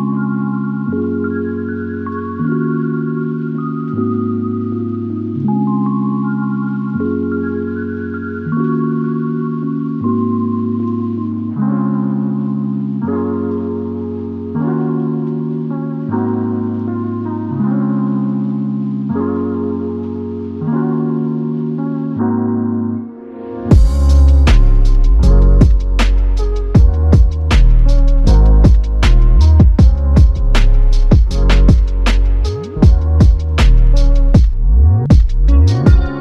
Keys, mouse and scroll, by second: 3.1 ctrl+i, 5.6 f, 6.9 double click, 10.9 shift+click, 14.5 shift+click, 17.2 alt+m, 20.7 f, 22.4 alt+click, 24.2 double click, 27.8 shift+click, 30.1 ctrl+alt+click, 31.0 alt+shift+click, 31.7 alt+click, 35.7 alt+click.